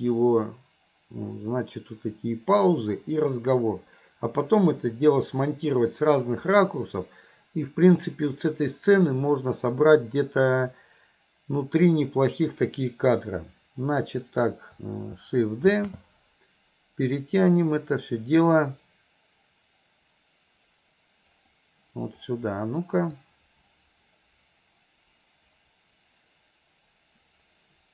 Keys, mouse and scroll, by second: 23.3-27.9 drag.